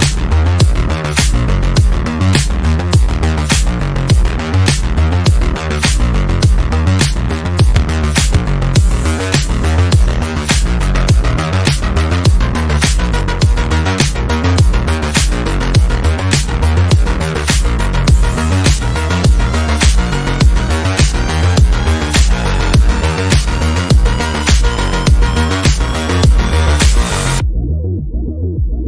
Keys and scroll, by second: 2.5 F3, 2.9 Escape.